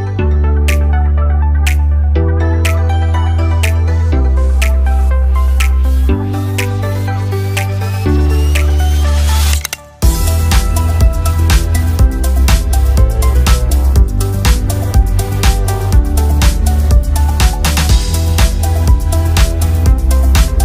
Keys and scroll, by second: 16.1 ctrl+d.